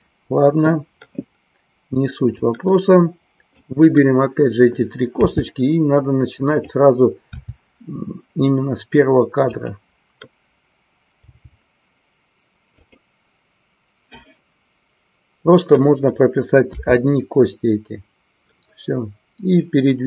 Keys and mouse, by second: 2.5-3.8 drag, 9.6 click, 12.8 click.